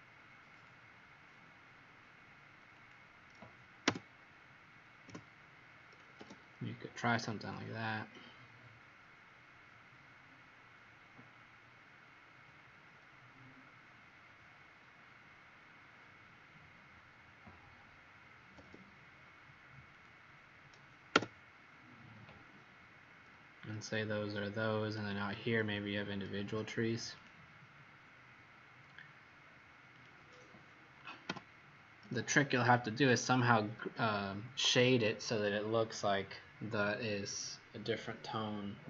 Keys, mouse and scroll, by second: 2.7 click, 3.8 Return, 7.4 click, 19.9 click, 21.1 Return, 24.9 scroll up 2, 27.2 click, 31.2 Delete, 32.3-32.7 scroll down 4, 34.1 scroll up 2.